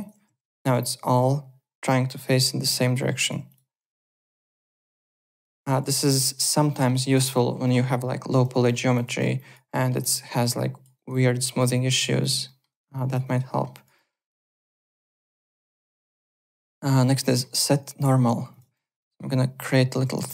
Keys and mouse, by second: 0.2 `, 0.6 click, 0.9 alt+right click, 1.0 alt+click, 2.9 alt+middle click, 3.1 alt+click, 3.5 click, 3.9 alt+middle click, 4.2 alt+right click, 4.4 click, 4.8-5.7 typing, 5.3 click, 5.9 alt+right click, 6.1 alt+click, 6.7 alt+middle click, 7.0 alt+click, 8.6 alt+middle click, 8.9 click, 9.1 z, 9.3 alt+click, 9.6 alt+middle click, 10.0 alt+click, 10.9 alt+right click, 11.1 alt+click, 11.7 alt+click, 12.4 alt+middle click, 12.7 alt+right click, 12.9 alt+click, 13.2 alt+right click, 13.5 alt+middle click, 13.7 alt+click, 13.9 alt+middle click, 14.2 alt+right click, 14.5 click, 14.9 alt+middle click, 15.1 alt+click, 15.5 click, 16.9 alt+Tab, 17.2 alt+middle click, 18.5 click, 18.7 ctrl+d, 18.9 w, 19.2 click, 19.7 alt+middle click, 20.0-20.3 typing.